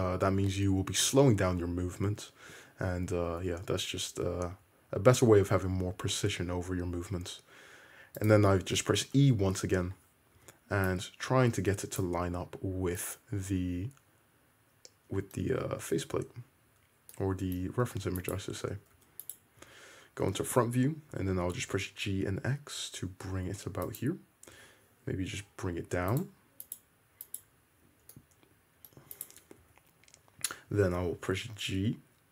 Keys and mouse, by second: 3.6 e, 8.5-18.4 drag, 8.5-11.0 right drag, 10.5 1, 15.6 `, 18.0 3, 18.4 middle click, 19.1 2, 19.3 click, 19.4-24.2 middle drag, 19.7 `, 21.2 g, 24.2-28.2 drag, 24.7 g, 28.6-29.2 middle drag, 29.2 click, 29.3-29.9 middle drag, 29.7 `, 29.9-32.3 drag, 30.8 g.